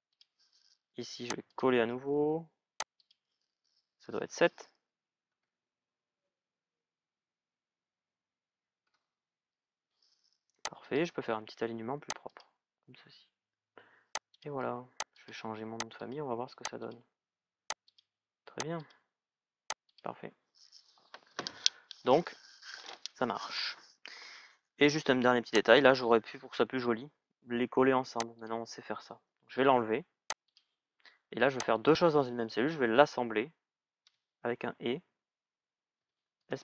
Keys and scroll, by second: 3.8 Delete, 5.0 shift+è, 8.5 shift+è, 8.6 Return, 29.3 Delete.